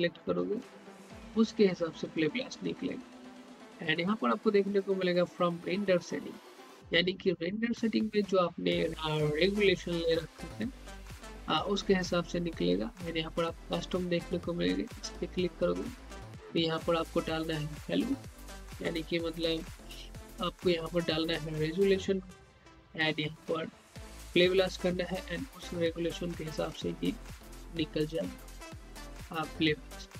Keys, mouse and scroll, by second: 3.3 click, 15.1 click.